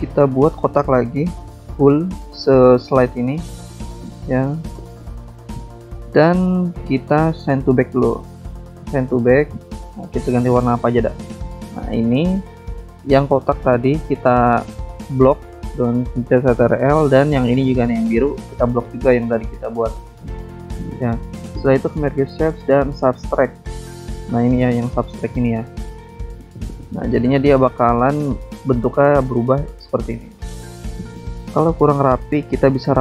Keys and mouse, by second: 1.6 click, 2.8 click, 4.3 click, 6.0 click, 9.0 click, 11.0 click, 12.8 click, 13.5 click, 14.1 click, 14.2 double click, 15.9 click, 18.1 click, 23.6 ctrl+click, 26.6 click, 28.1 click, 29.3 click.